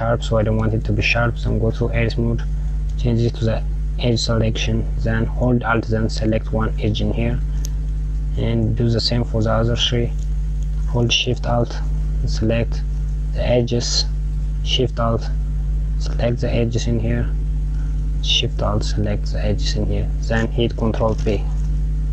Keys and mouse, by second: 1.3 Tab, 3.6 click, 6.5 alt+click, 8.3 click, 12.0 alt+shift+click, 13.4 alt+shift+click, 15.8 alt+shift+click, 16.9 alt+shift+click, 19.3 alt+shift+click, 20.8 ctrl+b.